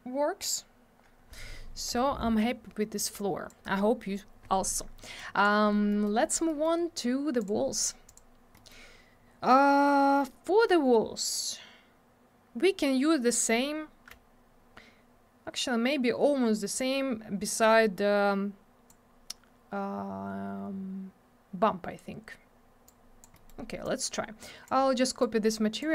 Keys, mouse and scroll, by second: 3.1 click, 5.2 click, 5.9 middle click, 6.1 middle click, 6.2 scroll down 1, 6.5 middle click, 6.6 middle click, 7.4 click, 7.5 click, 8.1 click, 8.2 click, 8.6 middle click, 8.7 middle click, 17.5 click, 22.9 click, 23.3 middle click, 23.5 middle click, 23.8 click, 25.2 shift+click.